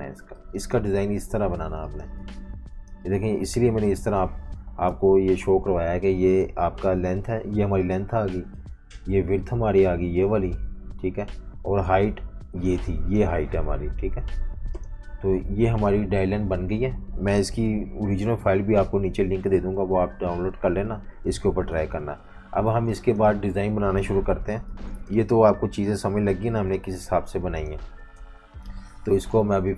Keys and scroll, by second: 0.4 typing, 1.6-3.7 typing, 4.9 F18, 28.2 F19.